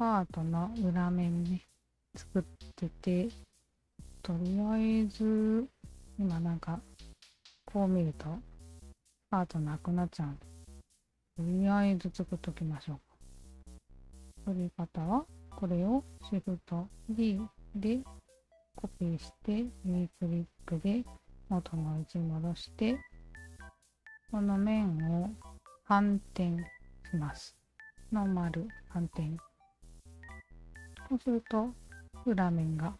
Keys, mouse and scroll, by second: 3.6 alt+click, 4.2-5.8 alt+drag, 6.1-10.3 alt+drag, 10.8-11.3 alt+right drag, 11.7 alt+click, 12.2-13.2 alt+drag, 13.4 alt+drag, 14.1 q, 14.5-15.1 alt+drag, 17.0 shift+d, 18.7 right click, 19.6-21.5 alt+drag, 22.3 Tab, 23.4 3, 23.7 alt+click, 25.7-28.0 alt+drag, 28.8 alt+click, 29.7 q, 30.1 Tab, 30.5 click, 30.5 q, 30.9-32.9 alt+drag.